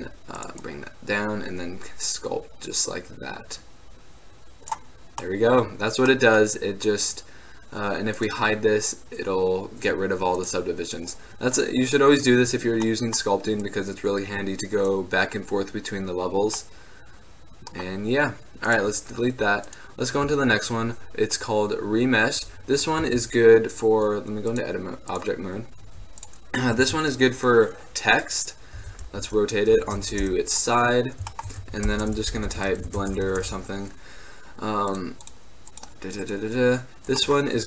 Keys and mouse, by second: 0.5-2.4 drag, 3.1 middle drag, 5.1 middle drag, 5.3 drag, 5.5-5.9 middle drag, 6.7-8.3 middle drag, 8.3-10.2 drag, 10.7-12.2 drag, 15.4 click, 15.6-16.9 middle drag, 18.8-21.7 drag, 22.7-24.2 middle drag, 23.1 Tab, 24.5-24.8 drag, 25.9 x, 26.5-28.3 drag, 26.8 shift+a, 28.7 click, 28.9 r, 31.1 middle click, 31.7 Tab, 31.9-33.5 typing, 35.0-36.1 drag, 36.5 drag, 37.3 click.